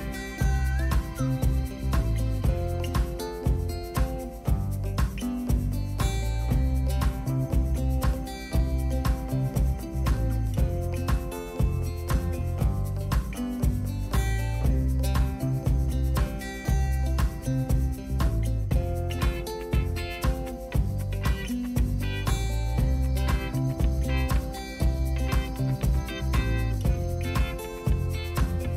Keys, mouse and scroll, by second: 0.2 click, 2.2-3.3 drag, 4.5 click, 5.3-8.2 drag, 9.4-16.6 drag, 17.2-21.5 drag, 21.9 click, 23.5-26.8 drag.